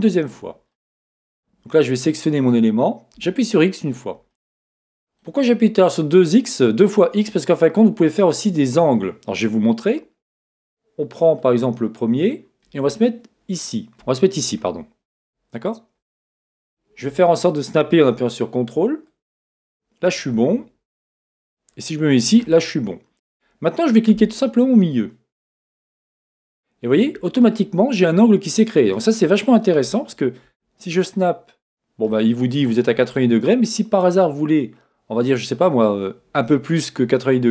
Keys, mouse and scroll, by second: 0.7-2.5 middle drag, 2.5-4.3 drag, 3.2 x, 4.3-11.8 middle drag, 19.0 middle click, 19.1-20.1 ctrl+drag, 21.8 ctrl+click, 22.4-25.5 middle drag, 25.5-37.5 drag.